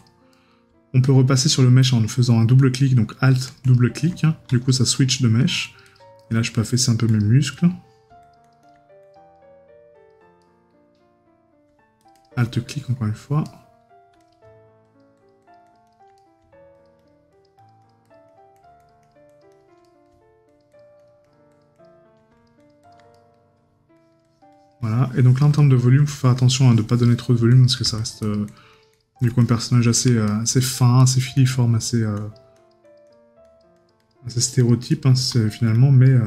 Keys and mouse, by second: 0.3 right click, 6.2 right click, 7.4 right click, 10.4 right click, 12.7 right click, 16.2 right click, 19.8 right click, 23.1 right click, 25.6 right click, 30.3 right click.